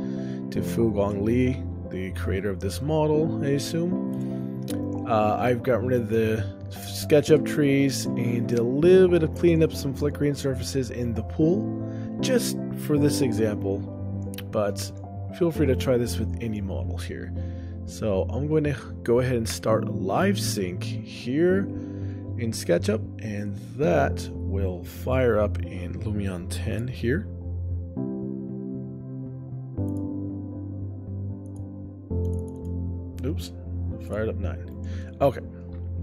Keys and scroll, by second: 34.1 ctrl+alt+o, 34.8 shift+space, 35.0 ctrl+alt+o, 35.8 shift+space.